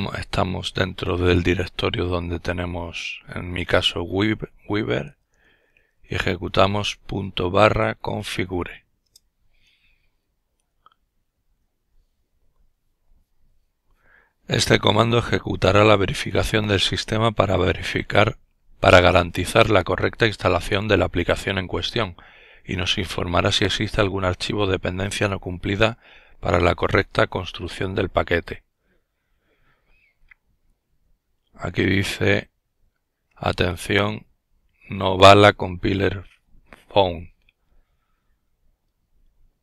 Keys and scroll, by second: 1.9-5.1 typing, 6.5-7.5 typing.